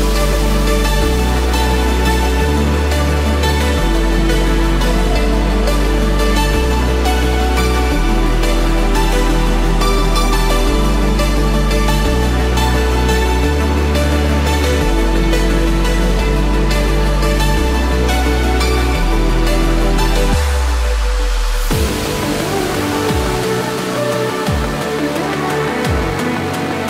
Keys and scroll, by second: 12.1 ctrl+-, 16.9 ctrl+z.